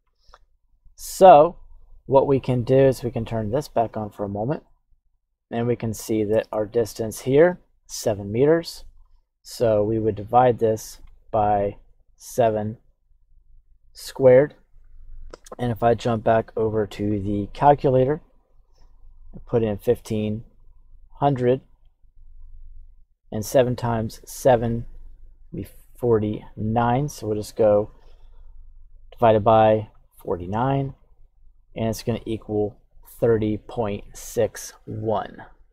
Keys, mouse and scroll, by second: 2.8 click, 8.9 click, 9.9-11.0 drag, 12.9 click.